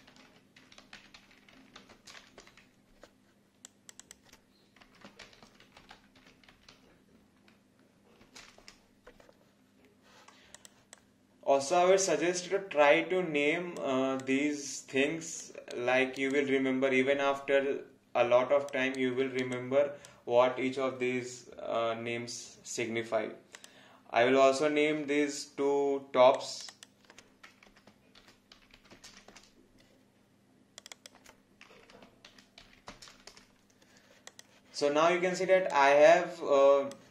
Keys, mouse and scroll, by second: 0.0-2.7 typing, 3.6 click, 4.9-8.4 typing, 8.6 Return, 10.5 click, 10.9 alt+click, 15.7 alt+right click, 16.3 alt+click, 18.9 alt+right click, 19.5 alt+click, 23.6 click, 26.4 click, 28.4-29.6 typing, 30.8 click, 32.4-33.6 typing, 34.3 click, 35.7 alt+click.